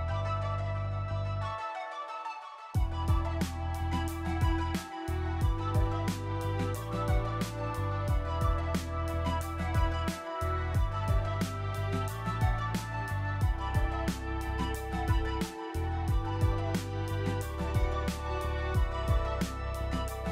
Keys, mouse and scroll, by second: 0.6 click, 1.1 click, 1.4 Delete, 2.0-3.2 typing, 2.0 click, 4.7 click, 5.3 click, 5.5 click, 6.0 click, 6.5 click, 6.9 click, 7.2 click, 7.4-8.5 typing, 8.6 click, 9.2 click, 9.4 click, 9.8 click, 10.3 right click, 10.8 click, 11.8 Delete, 12.7 click, 13.7-17.4 typing, 18.6-19.3 typing.